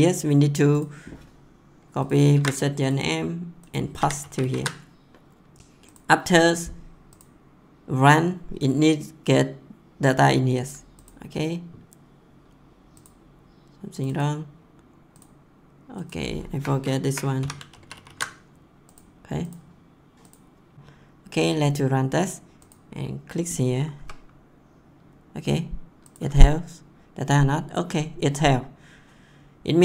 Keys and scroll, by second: 2.3 ctrl+c, 3.9 ctrl+v, 5.5 ctrl+s, 17.0 Left, 17.3 ;, 17.7 ctrl+s, 23.9 F10.